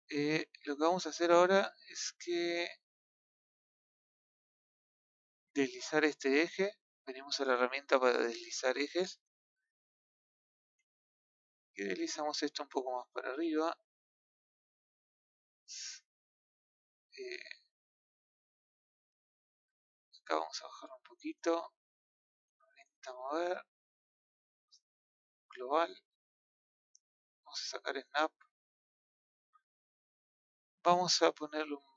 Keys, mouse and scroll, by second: 5.1-6.3 drag, 6.3-6.7 scroll down 4, 6.7-7.1 scroll up 1, 9.0-9.5 scroll up 2, 9.7 scroll up 1, 9.8 shift+middle click, 11.4 click, 14.6-16.8 middle drag, 17.0-21.3 middle drag, 21.3 click, 22.8 click, 25.1 click, 27.8 click, 30.1 click, 30.4-31.9 middle drag.